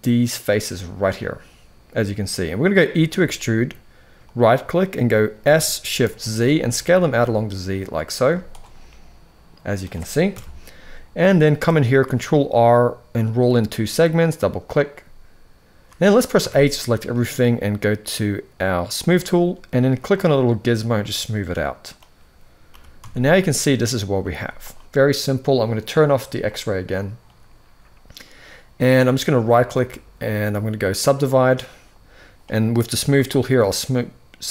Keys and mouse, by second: 0.8-2.4 middle drag, 2.7 e, 5.1 s, 7.9 z, 8.5 middle click, 10.0 KP_1, 11.7 ctrl+r, 16.1 a, 18.6 click, 19.9-21.6 drag, 22.4 g, 24.1 z, 29.1-30.8 right drag, 33.2-34.5 drag.